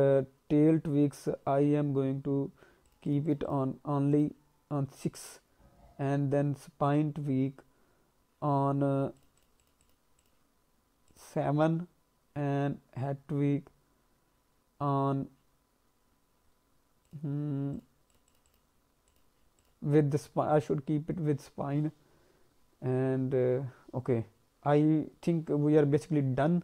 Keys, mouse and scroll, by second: 2.8 click, 3.0 click, 3.2 click, 3.4 click, 4.1 click, 9.1 click, 9.3 click, 9.5 click, 9.8 click, 10.1 click, 11.0 click, 17.0 click, 17.7 click, 18.1 click, 18.4 click, 19.0 click, 19.5 click, 24.6-25.4 scroll down 2, 26.3-26.6 scroll up 1.